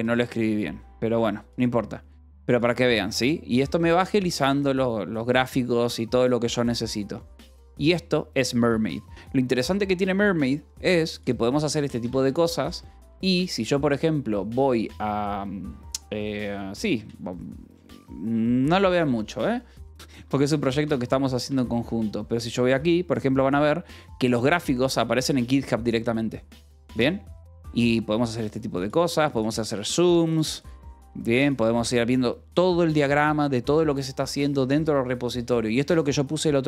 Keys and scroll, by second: 12.0 i, 12.6 t, 17.4 Return, 19.1 j, 20.8 f, 21.3 e, 22.5 j, 24.8 k, 25.1 j, 26.0 k, 26.5 j.